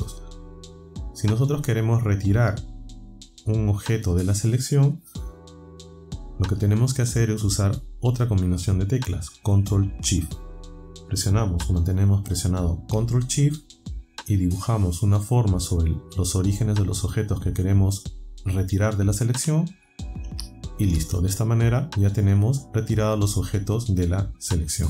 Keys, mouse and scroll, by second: 15.0-19.9 ctrl+shift+right drag.